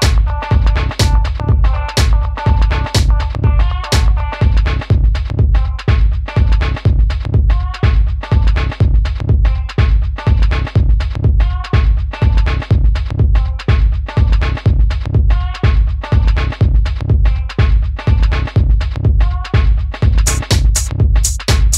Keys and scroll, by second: 19.9 super+d.